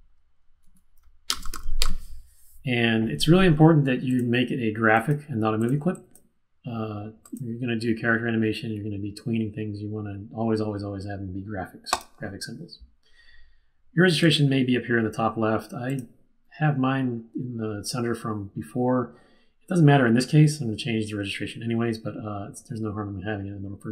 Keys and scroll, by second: 0.0-2.2 typing.